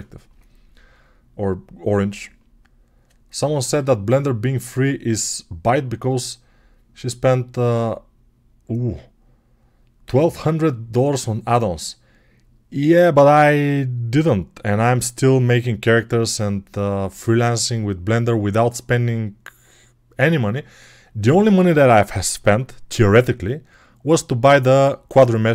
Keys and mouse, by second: 22.8 n, 24.5 click, 24.7-25.5 middle drag.